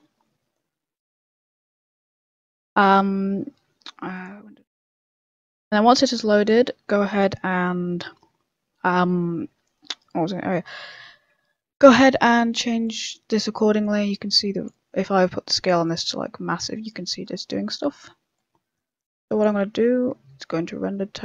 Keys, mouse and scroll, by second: 1.0 click, 1.0 scroll up 1, 4.1 click, 6.3 middle click, 6.9 middle click, 12.0 middle click, 12.8 click, 17.6 click, 17.6 middle click, 18.3 click, 19.7 z, 20.2 scroll up 2, 20.4 middle click.